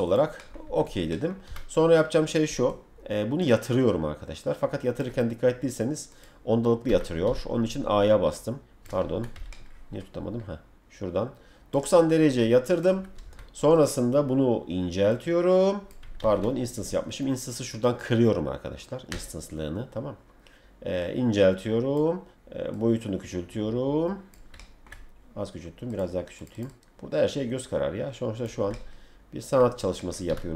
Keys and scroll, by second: 0.6 F3, 1.4 e, 6.9 Escape, 7.2 a, 13.2 F3, 16.2 ctrl+z, 30.2 w.